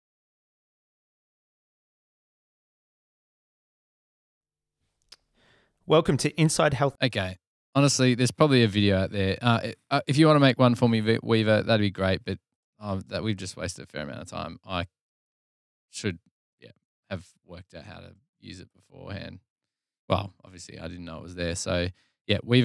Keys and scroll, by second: 6.4 space.